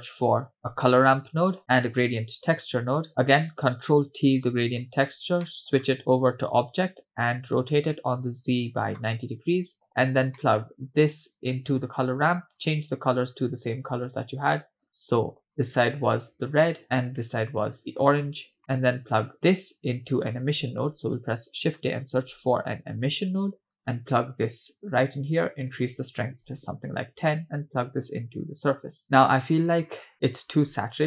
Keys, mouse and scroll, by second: 2.1 shift+a, 3.4 click, 4.3 ctrl+t, 5.1 scroll up 2, 5.4 middle click, 5.8-6.6 scroll up 2, 6.7-7.7 drag, 8.0 middle click, 8.8-9.9 drag, 10.4 middle click, 11.6-12.7 drag, 13.3 click, 16.8 click, 18.6 middle click, 19.8 click, 20.4 shift+a, 24.2-25.2 drag, 25.7 click, 28.1-29.0 drag.